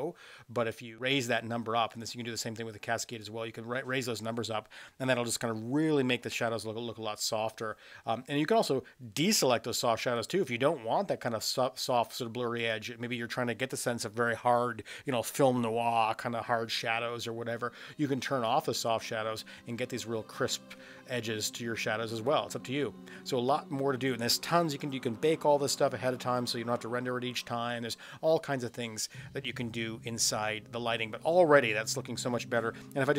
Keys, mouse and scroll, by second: 2.2-3.4 drag, 9.4 click, 10.3 click, 12.8 click, 18.5 click, 19.0 click, 22.3 click.